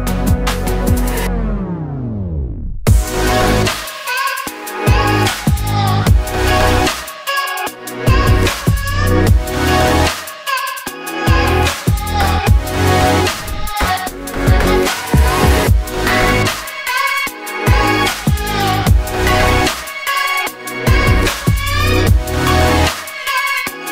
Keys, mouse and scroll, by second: 0.8-4.8 typing, 6.5 s, 7.3 ctrl+z, 7.6 s, 9.5-10.2 scroll up 1, 10.2 g, 10.8 click, 11.1 ctrl+z, 11.3 g, 13.1 KP_7, 13.7 r, 14.3 click, 14.8 g, 15.7 r, 17.3 KP_1, 17.7 r, 18.1 ctrl+z, 18.2 KP_7, 19.2 r, 20.4 KP_1, 20.9 g, 21.3 click, 21.4 ctrl+z, 21.6 g, 22.4 click, 22.8 g, 23.5 KP_3.